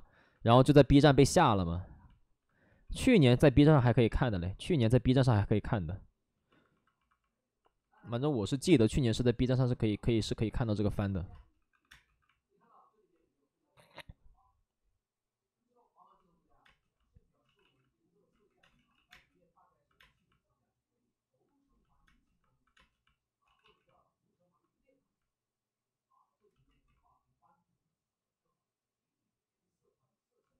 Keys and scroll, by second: 0.4 ctrl+z, 0.4 3, 2.6 5, 3.7 ctrl+z, 5.1 ctrl+z, 8.4 ctrl+z, 8.6 ctrl+z, 8.6 space, 10.0 alt+s, 10.9 alt+s, 11.2-12.0 typing, 16.6 space, 17.5 ctrl+z, 18.2 ctrl+z, 18.7 ctrl+z, 18.7 space, 19.0 space, 23.3 space, 23.4 ctrl+z, 25.7 ctrl+z, 26.6 ctrl+z, 27.8 ctrl+z.